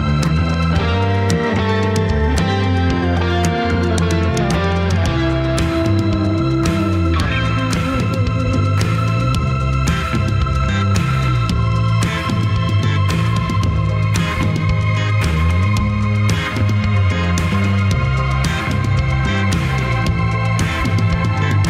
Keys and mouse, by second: 0.4 drag, 3.3 click, 4.2 t, 4.4 z, 12.2-13.2 middle drag, 16.3 alt+z, 19.0-20.3 middle drag, 20.5 Tab.